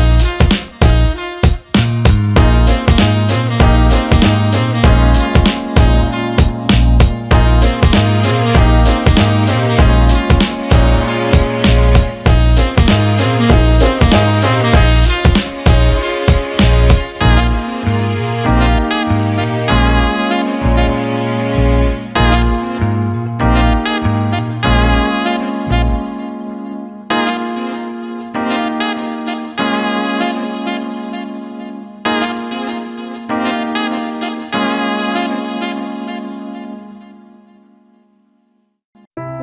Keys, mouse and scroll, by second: 0.0-0.5 right drag, 1.4 click, 3.6-7.5 drag, 7.7 alt+shift+middle click, 8.0 ctrl+alt+middle click, 13.1-14.2 drag, 14.4 alt+middle click, 21.3-23.5 drag, 23.7 ctrl+z, 26.8 alt+middle click, 27.3 alt+middle click, 27.6 ctrl+alt+click, 28.0 alt+shift+middle click, 28.9 Tab, 30.0 click, 31.7 alt+middle click, 32.7 click, 38.3 click.